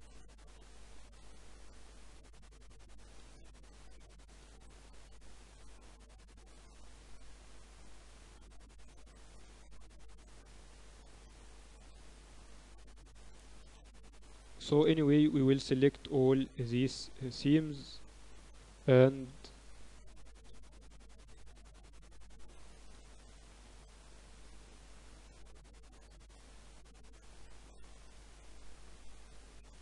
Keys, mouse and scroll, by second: 0.3 click, 0.7-3.5 right drag, 3.3-8.5 middle drag, 14.9-16.9 middle drag, 17.1-19.3 right drag, 20.3-21.1 KP_6, 22.2 shift+b, 26.8-28.9 middle drag, 29.7-29.8 typing.